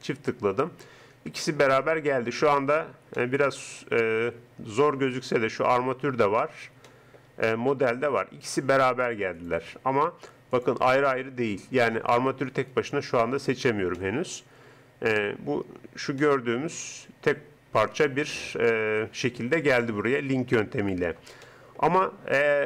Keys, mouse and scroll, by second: 0.9-5.5 middle drag, 11.1 click, 12.0-16.0 drag, 16.2 click, 16.4 middle click.